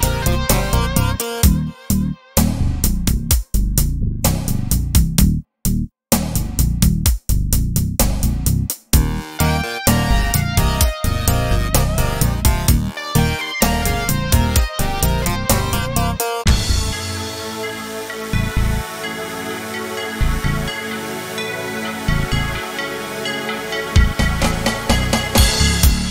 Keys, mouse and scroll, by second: 2.7-13.0 drag, 13.8-17.8 drag, 16.7-17.3 scroll up 2, 17.8-23.2 right drag, 23.2-24.7 middle drag, 24.7-26.1 right drag.